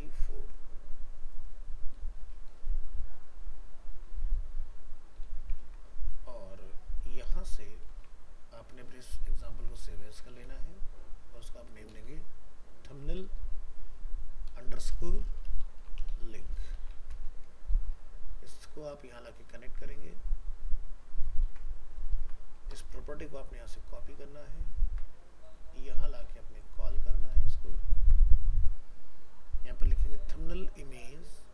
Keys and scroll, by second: 5.6 ctrl+s, 7.9 alt+f, 8.0 alt+移, 10.1 ctrl+Tab, 17.0 ctrl+c, 21.5 ctrl+v, 24.9 ctrl+c, 27.4 ctrl+v.